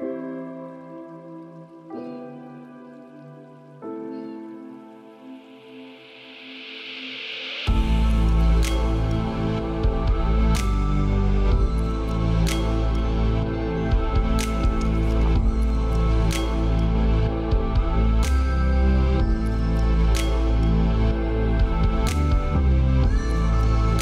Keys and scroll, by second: 2.4 ctrl+space, 12.6 ctrl+space, 14.1 ctrl+z.